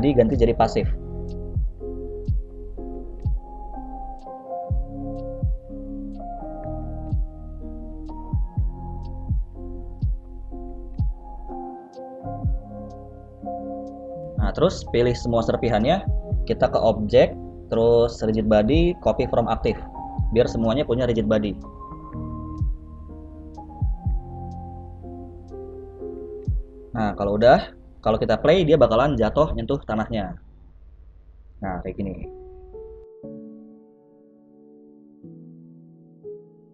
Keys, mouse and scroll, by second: 0.2 click, 1.1 scroll down 1, 1.6 click, 1.6-2.9 scroll down 2, 2.9 right click, 7.1 click, 8.1 click, 10.7 click, 11.2 click, 14.0 right click, 15.3 right click, 17.6 click, 27.1 right click, 27.7 right click, 28.3 right click, 29.2 ctrl+s, 30.4 click, 30.8 space, 34.6 middle click, 35.1-36.1 scroll up 1.